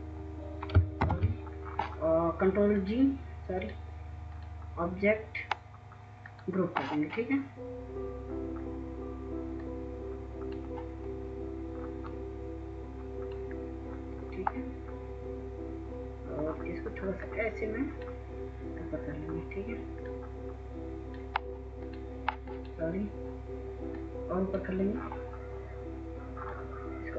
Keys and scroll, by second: 0.7 ctrl+-.